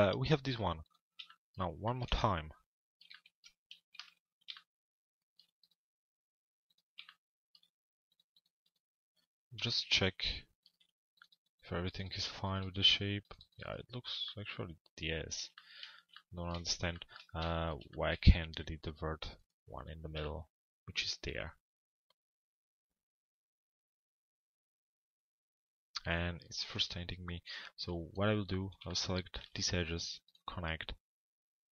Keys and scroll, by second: 3.6 alt+x.